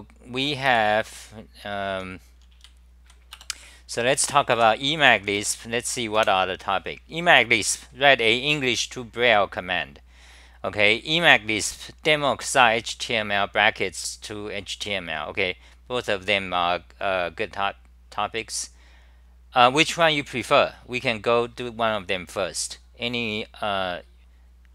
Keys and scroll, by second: 0.9-3.1 typing, 3.4 Return, 4.6 k, 5.2 c, 6.2 super+r.